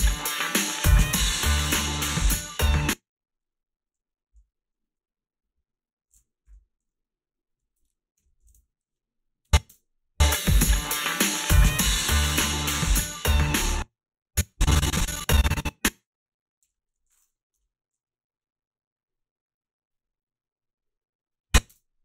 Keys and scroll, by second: 2.6 space, 8.0-9.7 typing, 13.5 space, 16.7 g, 17.5 Delete, 21.7 space.